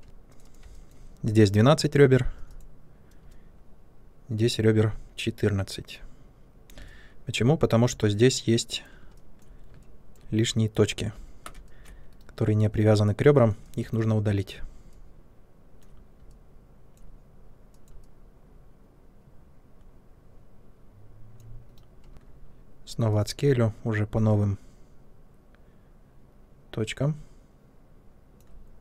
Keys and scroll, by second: 0.0 2, 21.6 Delete, 22.1 r.